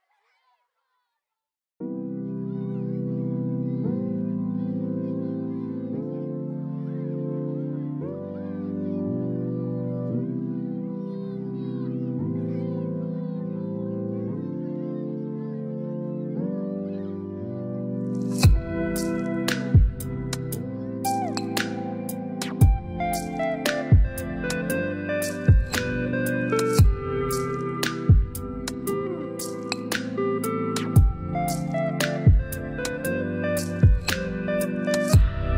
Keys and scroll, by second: 18.0 2, 18.6 8, 18.6 0, 19.6 Return.